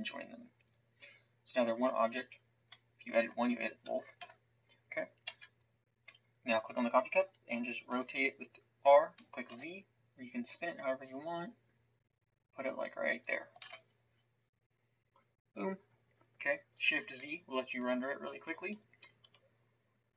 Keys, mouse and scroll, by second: 1.8 Tab, 3.8 Tab, 4.2 KP_1, 5.3 KP_0, 7.9 r, 13.6 shift+z.